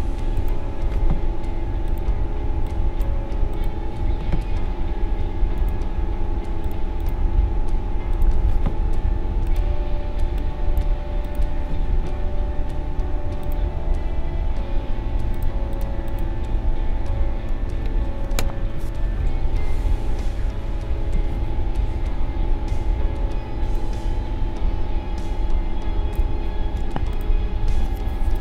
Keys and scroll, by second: 19.4 ctrl+-.